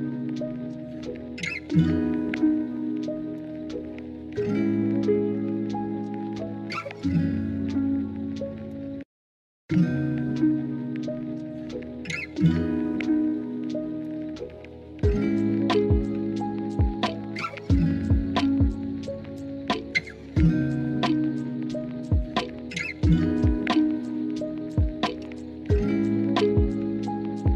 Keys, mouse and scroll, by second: 13.4 KP_1, 15.0 e, 22.9 s, 22.9 z, 23.4 click, 24.8 z, 26.3 alt+z.